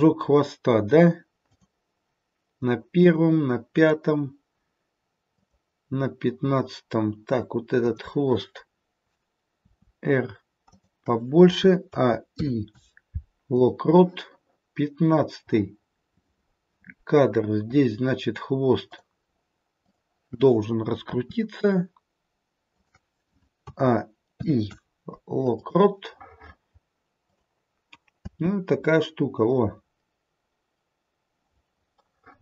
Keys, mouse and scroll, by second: 1.5 click, 3.0 click, 3.7 click, 5.4 click, 9.5 r, 11.8 a, 12.3 i, 18.8 click, 19.7 click, 21.1 r, 23.6 a, 27.2 click, 28.2 space, 32.0 middle click.